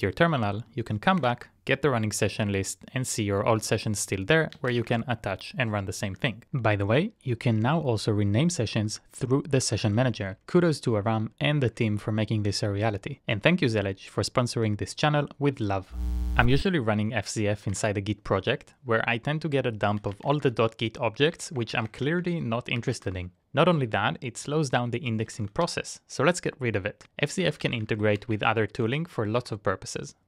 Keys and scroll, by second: 17.7 super+Tab, 19.9-20.8 typing, 21.4 Up, 21.5 Up, 21.7 Up, 21.9 Up, 22.2 Up, 22.5-23.9 typing, 25.1-30.2 typing.